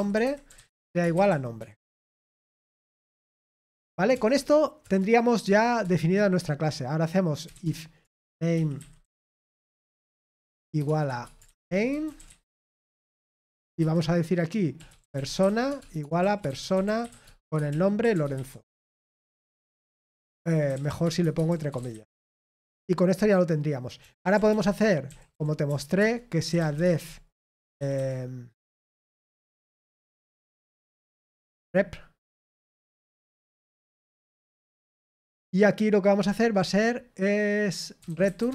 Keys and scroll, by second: 0.0-4.3 typing, 4.8 Return, 5.4 Return, 5.5-6.3 typing, 9.0-14.0 typing, 15.1-19.1 typing, 21.5-22.6 typing, 25.3-28.2 typing, 25.9 Return.